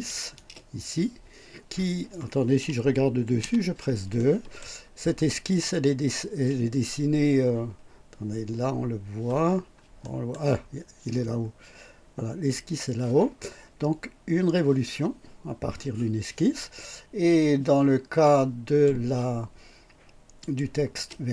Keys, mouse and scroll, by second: 0.3 space, 3.4 KP_2, 4.2-4.8 right drag, 5.5 click, 9.4-9.8 scroll down 1, 10.0 right click, 18.2 click, 20.4 click, 21.1 space.